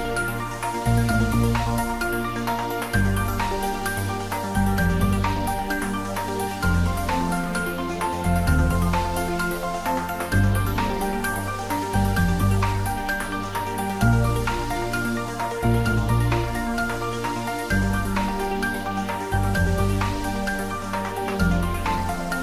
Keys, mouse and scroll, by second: 0.6 x, 2.2 click, 2.6 ctrl+z, 3.2 Tab, 3.9-5.0 typing, 6.3 x, 9.0 click, 11.4-17.7 middle drag, 17.7 g, 18.2 x, 20.7 click, 21.1-22.4 middle drag.